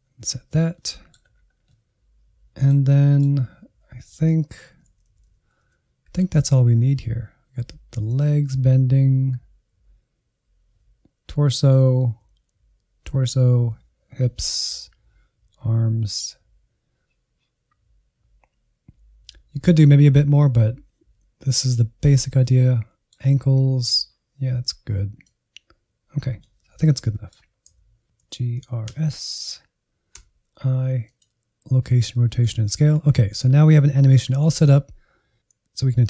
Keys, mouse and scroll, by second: 0.2 scroll down 1, 0.7 middle click, 1.2 scroll up 1, 1.7-4.3 middle drag, 4.3 Right, 4.6 Right, 4.7 Right, 4.9 Right, 5.1 Right, 5.3 Right, 5.7-6.0 scroll down 1, 6.0 Insert, 6.3-6.7 scroll down 1, 6.7 scroll up 2, 8.1-22.4 drag, 22.4-25.3 middle drag, 25.3-27.1 drag, 27.1 middle click, 27.8 a, 28.3 alt+g, 28.6 alt+r, 28.9 alt+s, 30.1 i, 32.1 middle click, 32.5 scroll down 2, 32.8 Insert, 33.1 middle click, 33.5-33.9 scroll up 1, 33.9-35.2 drag, 35.3 middle click.